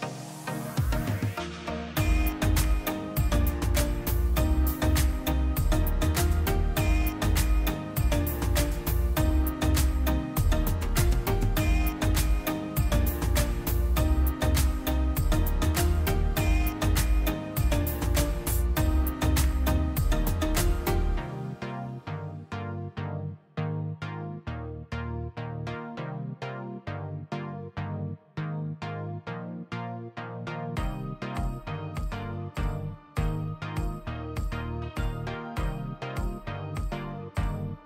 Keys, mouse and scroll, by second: 0.2 click, 4.9 click, 9.6 click, 13.3 click, 17.5 click, 22.0 click, 25.3 click, 29.6 click, 34.2 click, 37.0 click.